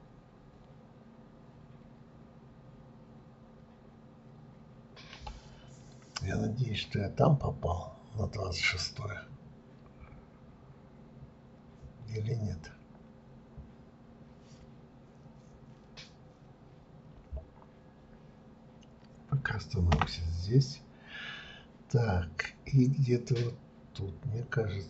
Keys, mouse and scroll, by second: 7.0-7.8 scroll down 2, 7.8 scroll up 2.